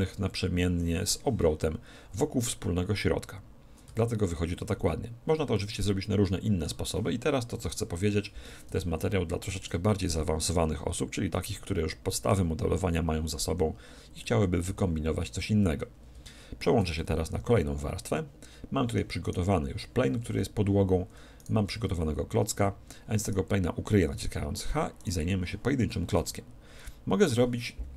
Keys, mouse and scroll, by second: 3.9 a, 5.5-7.4 middle drag, 7.7 KP_1, 9.0-10.8 middle drag, 9.9 z, 11.3 z, 11.7-13.2 middle drag, 13.4 alt+h, 14.7 a, 15.3-16.5 middle drag, 17.3 4, 19.2 middle click, 19.2-21.0 right drag, 20.3 z, 20.8 z, 21.1 middle click, 21.4-23.1 right drag, 21.9 z, 22.5 z, 23.2-26.7 right drag, 24.1 h, 26.0 KP_1, 26.8 KP_7.